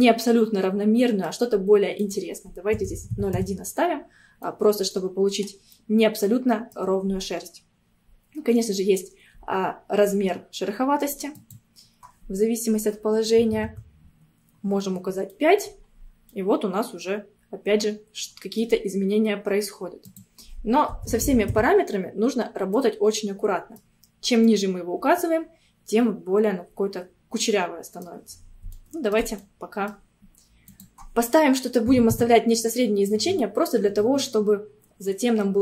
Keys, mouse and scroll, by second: 2.0-4.5 drag, 4.5 middle click, 5.3 scroll up 2, 5.8-8.9 middle drag, 11.4-14.5 drag, 15.0 scroll down 1, 15.4 middle click, 15.9 scroll down 2, 16.3-19.0 middle drag, 19.0 scroll up 1, 20.1-22.6 drag, 22.6 scroll up 1, 22.8-27.6 middle drag, 28.8-30.7 shift+middle drag, 30.7-33.2 drag, 33.2 scroll down 2, 33.4-35.6 middle drag.